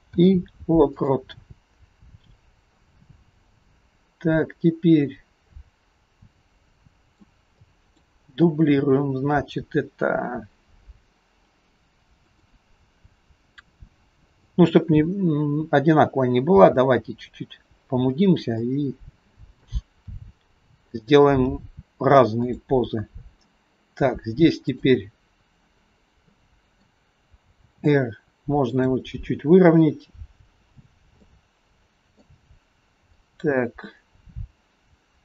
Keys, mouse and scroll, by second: 0.1 i, 3.1 click, 7.7 click, 12.3 click, 14.4 click, 15.4-16.5 scroll up 2, 16.5 g, 18.6 middle click, 20.2 r, 21.5 g, 24.8 click, 25.9-26.3 scroll down 2, 26.3 middle click, 27.6 r, 31.4 middle click, 33.1 click.